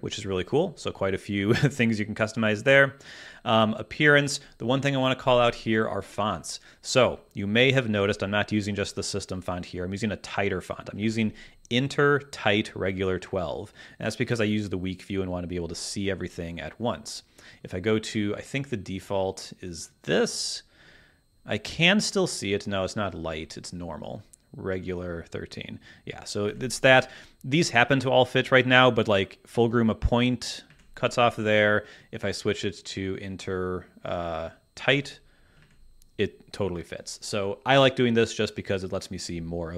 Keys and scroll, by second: 7.8 super+`, 11.0 super+`, 26.4 super+`, 30.6 super+`, 35.6 super+`.